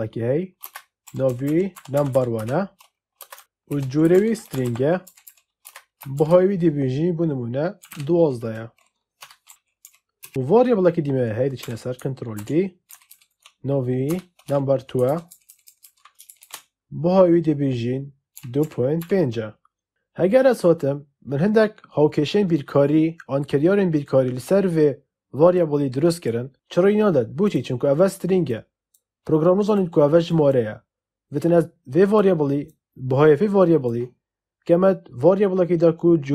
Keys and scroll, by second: 0.0-6.1 typing, 7.7 Down, 7.8 End, 9.1 Num_Lock, 9.4 Up, 9.5 2, 9.7 Right, 10.1 Return, 11.5 Up, 12.3 ctrl+d, 12.8 Right, 14.0 BackSpace, 14.4 2, 15.0 ctrl+Right, 16.2 shift+Left, 18.0-19.4 typing.